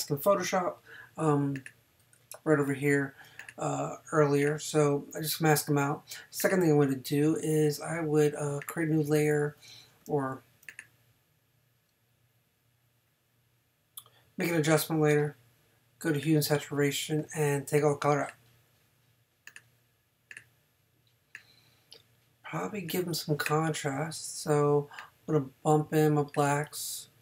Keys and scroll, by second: 10.1 super+z.